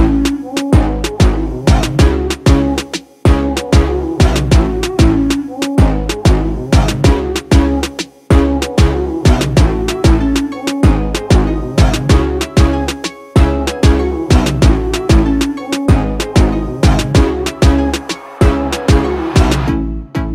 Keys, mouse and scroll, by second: 1.4 ctrl+j, 4.2 v, 5.5 click, 12.3 click, 15.5 click, 18.9-20.3 click.